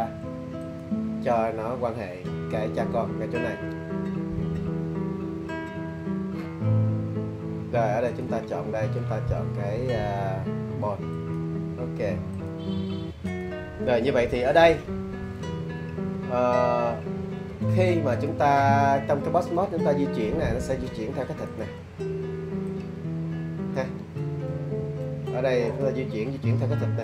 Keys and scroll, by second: 24.8 super+z.